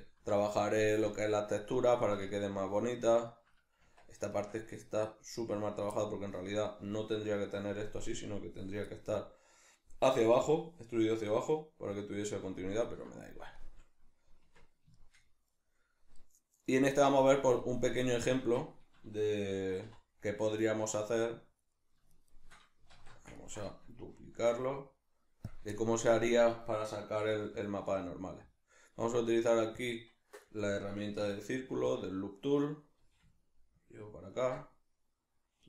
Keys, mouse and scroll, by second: 1.1 click, 1.7-20.6 middle drag, 3.8 Tab, 14.4 Tab, 18.4 Tab, 20.6 right click, 20.9 shift+right click, 21.7-22.1 middle drag, 22.1 shift+right click, 22.3 shift+right click, 22.9 alt+q, 23.3-25.5 ctrl+middle drag, 24.4 shift+d, 25.5 click, 25.7-31.9 shift+middle drag, 27.2 w, 31.9 click, 33.0 g, 34.4 ctrl+click, 34.6-35.6 middle drag.